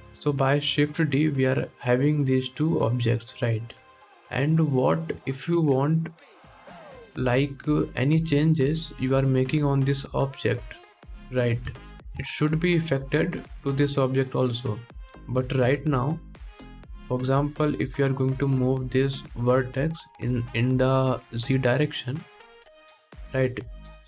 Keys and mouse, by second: 0.4-3.7 drag, 5.0 click, 5.2 Tab, 6.3 ctrl+Tab, 11.3 Tab, 11.8 Tab, 15.3 Tab, 17.1 click, 17.8-23.6 drag, 23.6-24.0 middle drag.